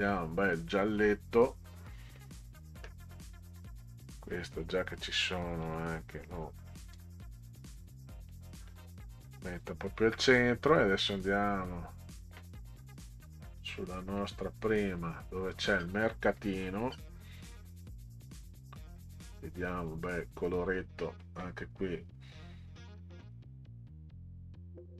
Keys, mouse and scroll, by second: 2.4 click, 3.7 click, 5.6 click, 6.9 Up, 8.7 click, 10.9-11.6 scroll up 4, 13.5 middle click, 14.2 click, 15.7-17.0 scroll down 10, 18.1 click, 18.3 click, 19.7-20.8 drag, 23.2 click.